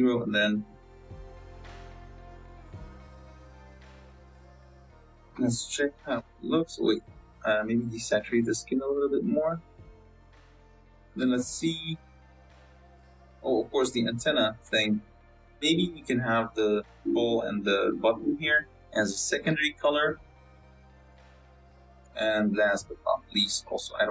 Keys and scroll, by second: 0.4 z, 5.3 z, 12.3 z, 16.1 Tab, 16.5 a, 17.6 l, 18.6 l, 20.7 Tab, 21.1 z.